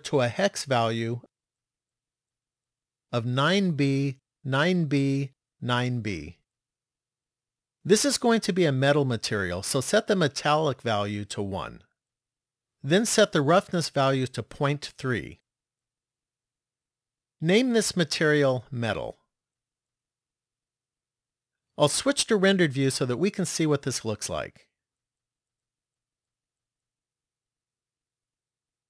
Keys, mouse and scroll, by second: 9.9 click, 13.8 click, 18.0 click, 18.1 click, 23.9 click.